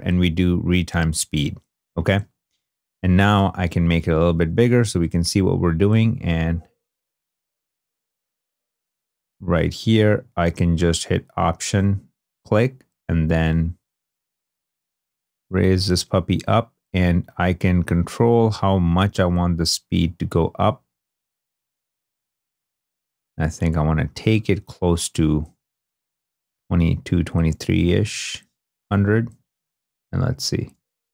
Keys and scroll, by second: 3.7 2, 4.8 |, 27.6 2, 30.4 space.